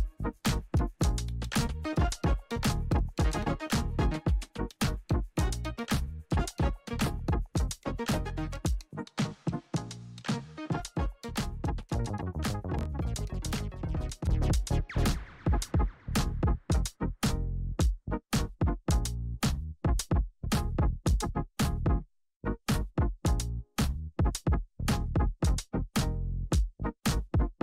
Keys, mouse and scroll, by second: 0.9-2.1 typing, 1.1 click, 2.8-16.6 drag, 19.4 ctrl+alt+Home, 21.8 click, 25.2 s, 25.7-27.6 drag.